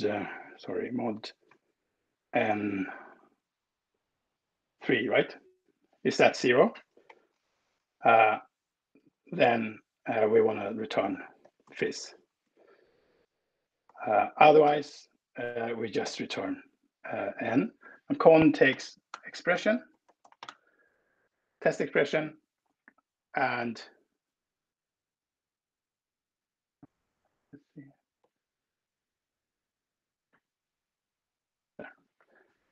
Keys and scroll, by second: 0.0 Left, 1.2 Left, 2.3 Right, 3.7 space, 4.5 3, 6.7 ctrl+alt+Down, 8.0 ctrl+alt+Down, 8.7 Right, 10.3-12.1 typing, 12.2 Right, 13.2 Down, 13.6 Up, 14.0 Right, 14.5 Return, 15.9 n, 17.8 Left, 18.8-20.7 typing, 21.4 Left, 22.0 Left, 22.6 Left, 24.8 Up, 25.8 Left, 27.8 ctrl+alt+Right, 28.0 ctrl+alt+Right, 30.0 ctrl+alt+Right.